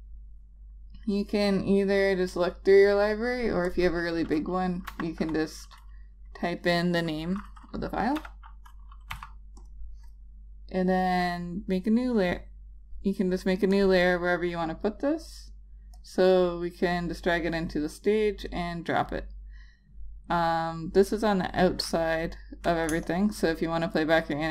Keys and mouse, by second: 2.3 click, 5.0 a, 8.3 u, 9.2 d, 9.7 click, 13.9 click, 23.0 click, 23.6 space.